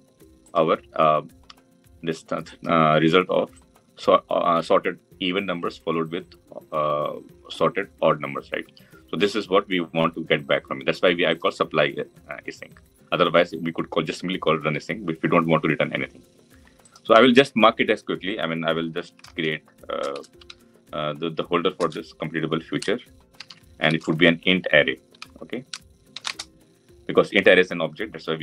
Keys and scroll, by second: 21.6 Return.